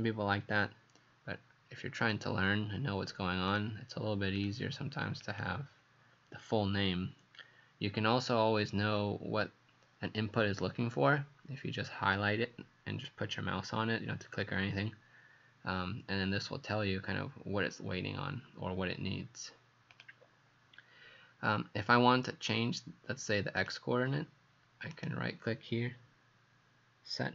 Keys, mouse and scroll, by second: 24.9 right click.